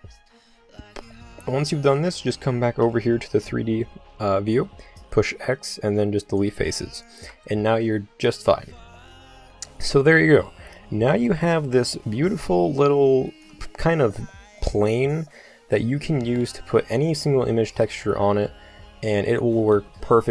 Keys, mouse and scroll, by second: 2.0-4.0 drag, 5.3 x, 12.3 Tab, 16.0 middle click, 16.5 click, 18.3 Tab.